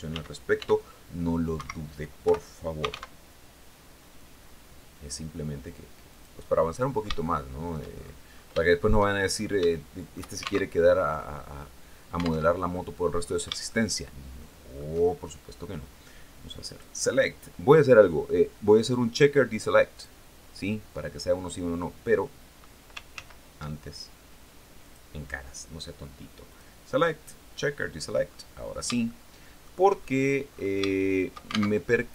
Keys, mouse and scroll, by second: 0.0 x, 1.0 Escape, 1.7-2.8 typing, 5.5 click, 5.9 click, 7.4-8.0 shift+scroll down 2, 8.1 shift+click, 8.6-9.0 shift+scroll up 2, 9.1 shift+click, 10.1 alt+shift+Tab, 11.9 alt+Tab, 12.2 alt+click, 13.1-14.4 shift+drag, 16.1 click, 19.4 click, 22.6 ctrl+z, 24.3 click, 25.9 click, 26.9 click, 27.7-29.3 drag, 29.4 shift+scroll down 1, 29.9-30.3 scroll up 1, 30.3 shift+click, 31.2 alt+shift+Tab.